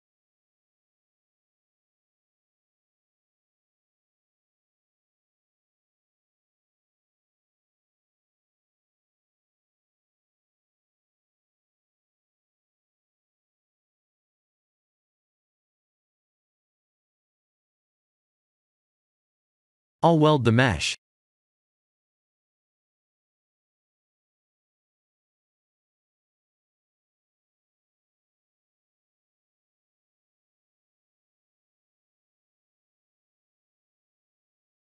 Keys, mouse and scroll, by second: 0.4 click, 1.5 middle click, 2.9-3.4 scroll up 3, 3.4 middle click, 6.6 click, 19.4 click, 22.6-26.1 scroll down 3, 26.1 click, 30.9-31.5 scroll up 3, 31.3 middle click, 34.4 click.